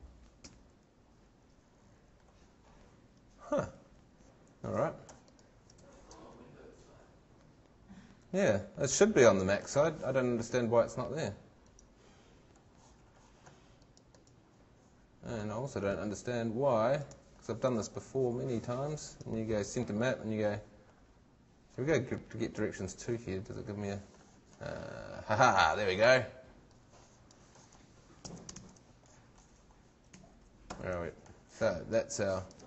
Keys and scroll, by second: 0.4 shift+g, 5.8 shift+super+Tab, 28.2 shift+super+c, 28.6 shift+super+Tab, 30.2 shift+super+Tab.